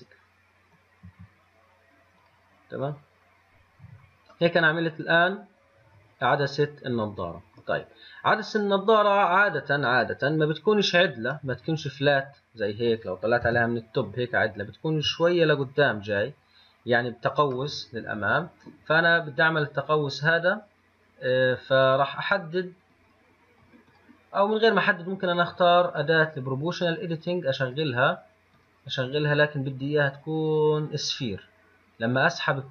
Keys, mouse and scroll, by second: 1.3 m, 2.5 click, 3.6-4.6 scroll down 1, 4.6-7.7 middle drag, 8.1 scroll down 3, 9.4-9.9 scroll down 2, 11.7-13.7 middle drag, 13.7 KP_7, 18.0-21.0 middle drag, 23.2 click, 24.1 click, 25.0 click, 26.1-28.0 drag, 28.8 click, 29.3-32.5 drag.